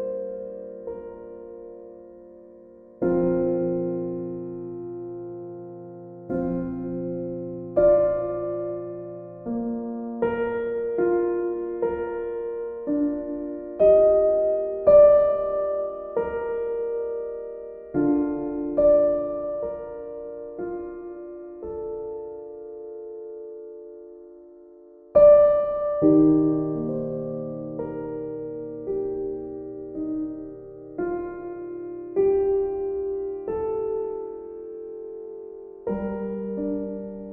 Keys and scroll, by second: 9.3 b, 16.3 b, 33.3 b.